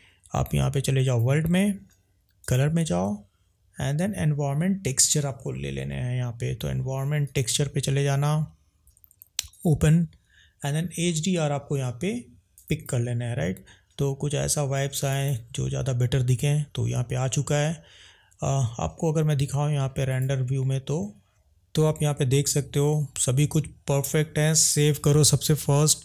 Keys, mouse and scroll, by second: 1.1 click, 2.4-7.4 drag, 9.6 click, 25.6 ctrl+s.